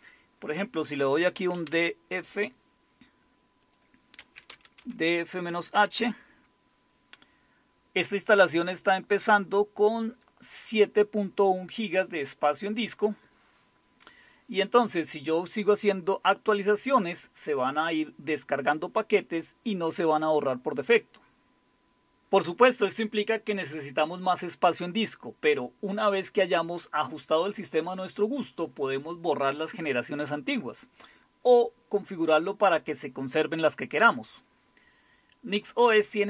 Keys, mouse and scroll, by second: 1.1-2.0 typing, 3.7 click, 4.0-6.0 typing, 8.8-10.3 drag, 12.8 click.